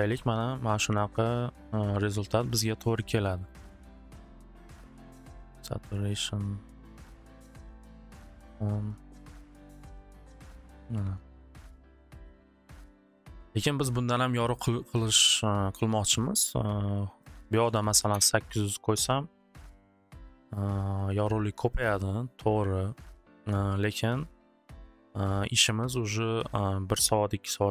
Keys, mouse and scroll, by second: 0.8 click, 1.3 click, 1.8 click, 2.6 click, 2.8 click, 3.3 click, 3.5-4.4 typing, 3.5 click, 4.7 click, 5.2 click, 6.2 click, 6.7-7.6 typing, 6.8 click, 6.9 click, 8.9 click, 9.4-10.1 typing, 9.5 click, 10.6 click, 12.7 click, 16.7 click, 17.3 click, 17.4-18.3 typing, 17.5 click, 22.7 typing.